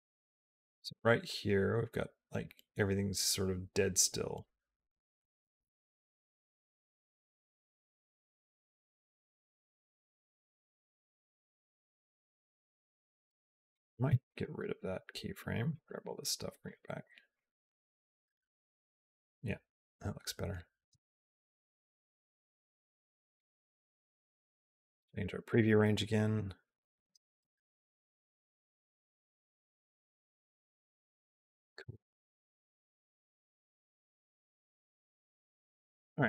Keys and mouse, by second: 13.6 click, 13.9 x, 15.1 click, 15.7 g, 17.2-23.2 drag, 24.4 p, 26.9 space, 35.9 click, 35.9 space.